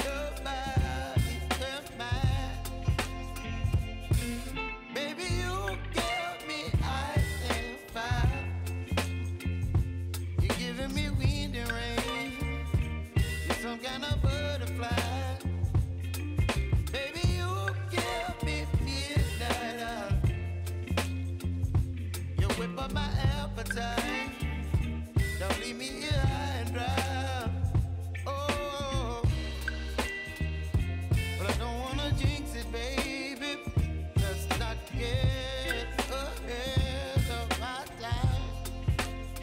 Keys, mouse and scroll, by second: 5.7 F9, 6.5-12.7 drag, 13.0 space, 14.7 click, 17.6 space, 18.5 click, 20.0 [, 20.6 click, 23.0 space, 23.9 click, 24.4 [, 25.1 click, 25.3 space, 27.6 click, 30.7 t, 31.4 click, 31.6 space, 33.4-37.4 drag, 37.4 F9, 38.3 click.